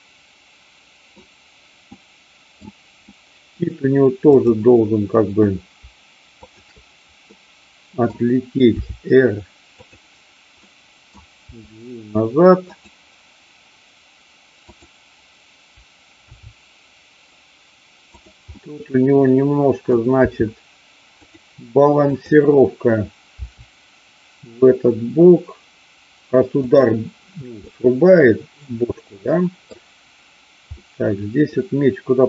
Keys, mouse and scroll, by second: 1.9-2.5 middle drag, 3.2-3.5 middle drag, 4.3-5.4 drag, 7.3-8.0 middle drag, 8.8 r, 9.8 click, 10.5-11.2 middle drag, 11.4 g, 12.6 click, 14.6-15.6 drag, 16.2 r, 18.2 click, 18.5-19.9 middle drag, 20.3 r, 21.3 click, 23.3 r, 27.6-29.6 middle drag, 30.8-32.2 middle drag.